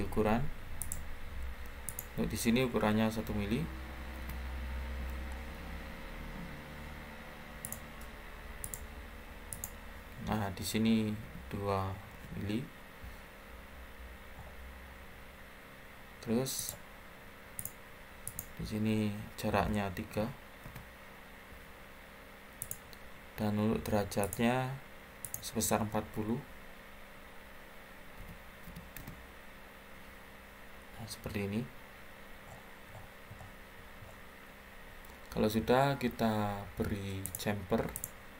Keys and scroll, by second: 3.4 1, 4.1 Return, 11.1 2, 12.0 Return, 20.0 3, 20.5 Return, 24.0 typing, 27.8-28.6 typing, 28.9 Return.